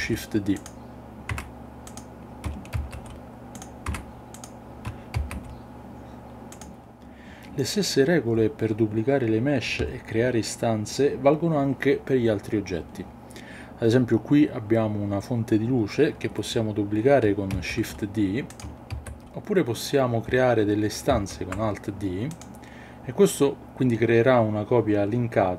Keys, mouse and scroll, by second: 0.5 click, 1.3 Tab, 2.8 shift+d, 3.9 Tab, 4.3 click, 5.2 shift+d, 6.5 click, 17.6 shift+d, 19.0 shift+d, 21.1 alt+d, 22.4 click.